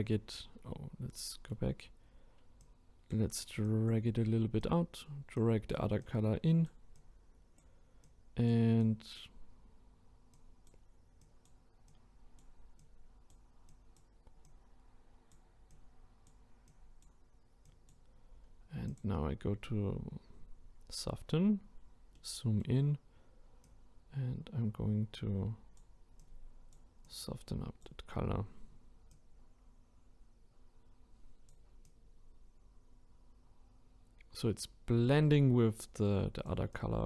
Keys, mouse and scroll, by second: 0.5-1.2 scroll down 1, 1.2-2.6 middle drag, 2.6-21.2 drag, 21.2-21.7 scroll up 1, 22.1-22.9 middle drag, 22.9-23.6 scroll up 1, 23.6-28.0 drag, 28.0-29.1 scroll down 2, 29.1-34.9 drag, 36.7-37.0 drag.